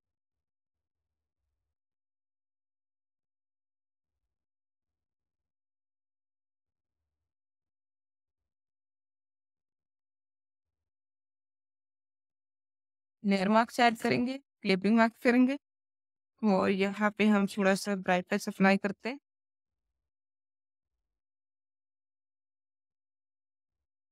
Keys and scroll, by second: 15.9 b, 16.5 alt+b, 17.0 alt+space.